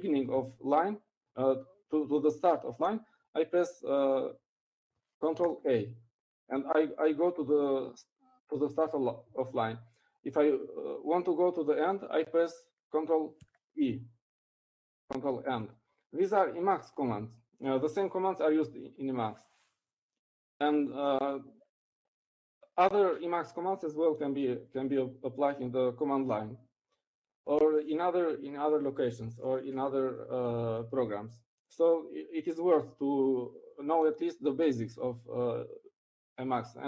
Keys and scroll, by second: 8.4 ctrl+a, 16.2 ctrl+e.